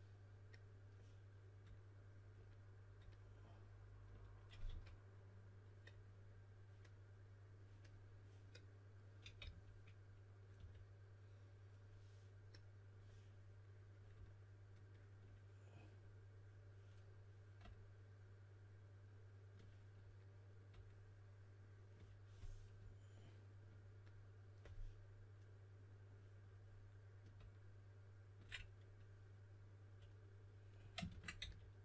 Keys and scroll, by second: 4.6 5, 9.1-10.5 typing, 31.0-31.3 typing.